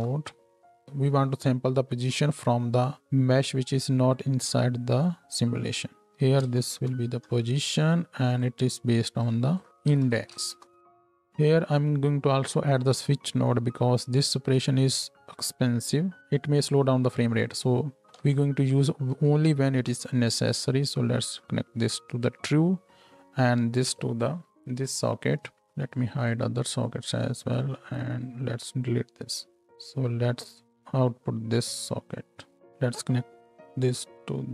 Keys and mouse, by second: 0.8-2.8 drag, 8.3-9.3 drag, 18.1-19.1 ctrl+drag, 18.2 ctrl+z, 19.3-21.5 shift+drag, 19.6 shift+d, 25.6 ctrl+h, 25.6 ctrl+click, 29.7 ctrl+x, 32.6 ctrl+h.